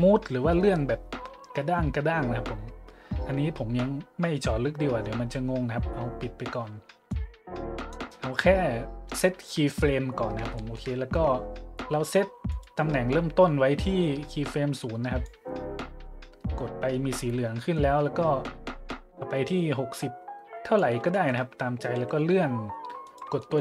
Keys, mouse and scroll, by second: 7.1 click, 10.5-10.9 shift+middle drag, 12.5 right click, 14.3 click, 17.7-20.8 drag, 21.1-21.4 shift+middle drag, 21.9 g, 23.0-23.4 shift+drag.